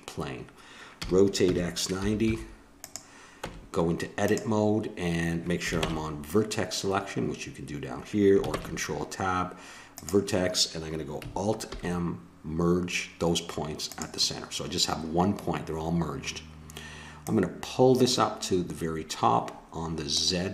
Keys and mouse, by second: 1.0 r, 3.4 Tab, 5.8 ctrl+Tab, 8.5 ctrl+Tab, 11.7 alt+m, 17.2-18.9 drag.